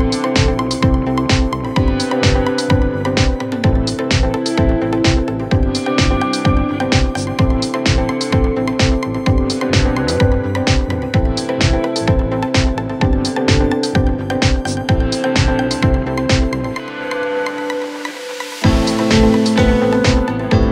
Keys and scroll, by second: 6.1 3, 11.6 ctrl+z, 12.9 ctrl+z, 18.8 F1.